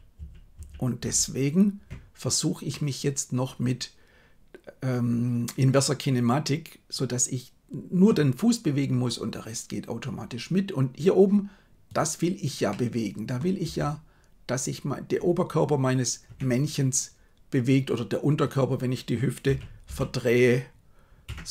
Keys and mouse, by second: 0.2 ctrl+z, 0.5 ctrl+z, 0.9 ctrl+z, 2.6-8.1 middle drag, 12.6-13.3 middle drag, 13.7 r, 19.4 r.